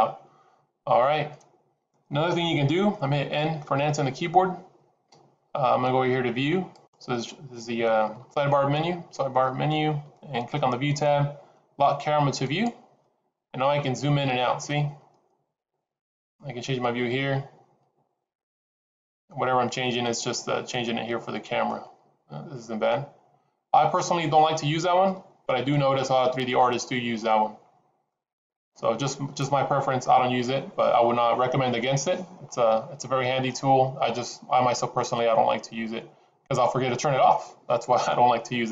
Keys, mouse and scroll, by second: 0.6 scroll up 2, 1.3 scroll down 2, 4.0 n, 6.7 click, 12.4 click, 13.4-14.8 scroll up 6, 14.8-15.3 scroll down 4, 15.8-16.3 scroll down 3, 16.3 middle click, 21.8 scroll up 1, 25.0 shift+middle click, 26.3 middle click, 32.4-33.1 scroll up 1, 33.1-33.4 scroll down 2, 34.1-34.6 scroll up 1.